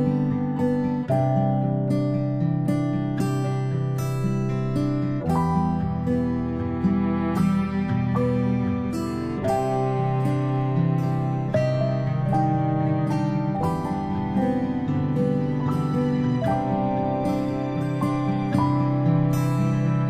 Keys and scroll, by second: 2.0 v, 8.6 alt+shift+i, 10.3 v, 17.8 alt+shift+i, 19.0 v.